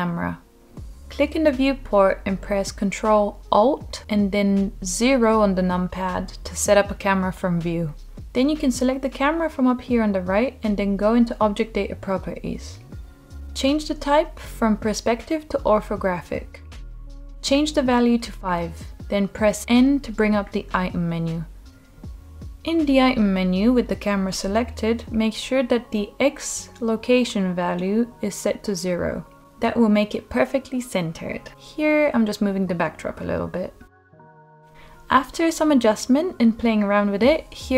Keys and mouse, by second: 2.5 ctrl+alt+KP_0, 10.4 click, 13.5 click, 14.1-19.5 drag, 20.0 n, 22.4 click, 23.0-26.4 drag, 31.3 g.